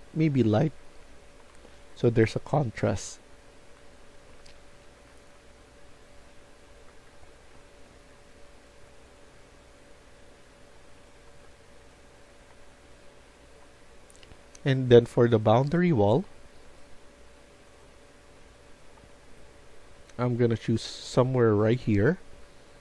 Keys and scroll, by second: 0.3-2.4 typing, 3.6 typing, 4.7-7.8 typing, 11.1-13.0 typing.